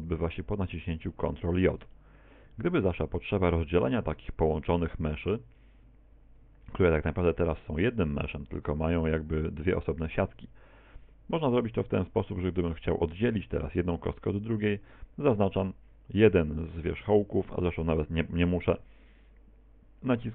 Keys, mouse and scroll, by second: 0.4 right click, 1.2 Tab, 2.0 middle click, 3.9 middle click, 5.8 Tab, 11.5 right click, 12.6 right click, 13.0 right click, 18.7 a.